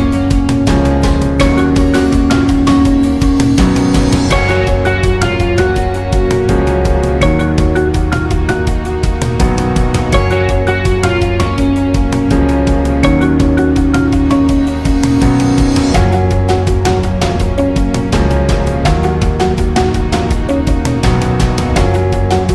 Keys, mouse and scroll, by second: 7.7 alt+scroll up 1, 7.9-12.3 typing, 8.1 click, 8.9 alt+scroll down 1, 9.2 click, 10.3 alt+scroll up 1, 10.6 click, 11.6 alt+scroll down 1, 11.9 click, 13.3 click, 13.8 right click, 14.5 click, 18.9-22.5 drag.